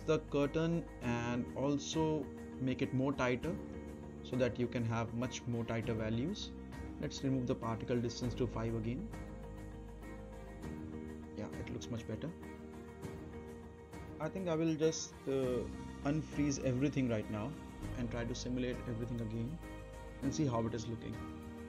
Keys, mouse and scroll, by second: 0.7 click, 2.3-4.2 right drag, 4.8 click, 7.2 5, 7.9 click, 9.1 scroll up 1, 9.4-10.0 right click, 10.2 space, 16.2 space, 16.6 click, 17.3 right click, 18.0 click, 18.2-18.5 scroll up 1, 18.5 middle click, 18.7 click, 18.9 right click, 19.6 click, 20.1 space.